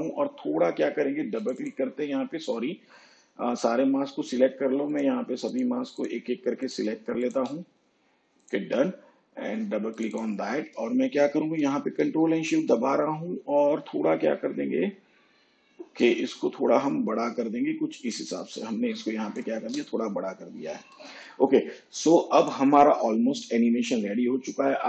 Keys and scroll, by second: 20.9 shift+/.